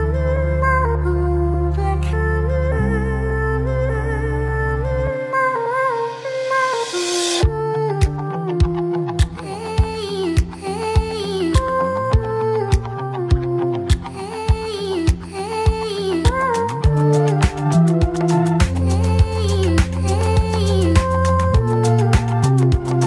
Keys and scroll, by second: 2.2 alt+2, 2.5 ctrl+r, 2.7 ctrl+c, 3.6 1, 4.6 ctrl+shift+e, 7.5 2, 9.0 ctrl+r, 10.4 F3, 11.4 ctrl+c, 12.1 Return, 12.4 1, 13.3 Delete, 13.6 F3, 14.0-16.0 typing, 15.3 ctrl+r, 15.4 ctrl+c, 17.6 ctrl+shift+e, 18.1 2, 18.5 ctrl+r, 18.7 ctrl+c, 20.3 1, 20.9 ctrl+z, 21.7 ctrl+shift+e.